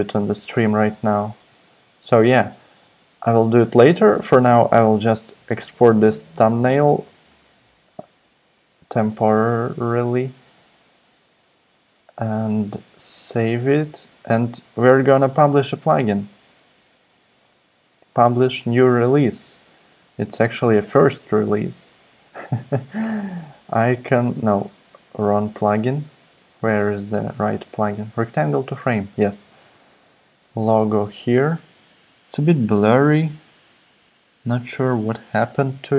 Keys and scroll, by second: 29.3 space, 30.2 space, 30.6 space, 35.5 space.